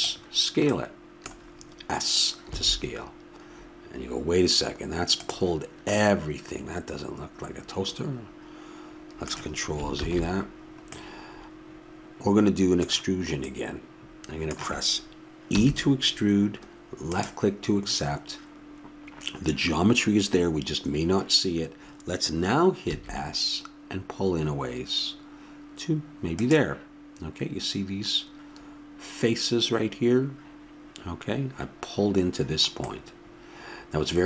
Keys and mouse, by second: 6.0-10.0 middle drag, 10.0 ctrl+z, 13.5-15.5 middle drag, 15.5 e, 26.3 s, 33.3-34.2 middle drag.